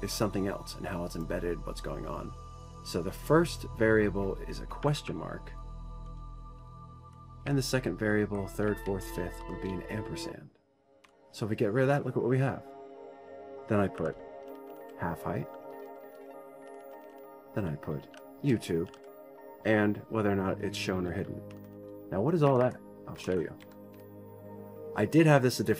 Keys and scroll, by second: 5.6 ctrl+z, 7.2 shift+Home, 7.8 Delete, 8.1 Right, 8.7 Right, 9.5 Left, 10.1 shift+End, 11.7 Delete, 14.6-20.0 typing, 22.2 shift+Home, 22.3 shift+Home, 23.1 Delete, 23.8 Delete, 24.0 Delete, 24.3 Up.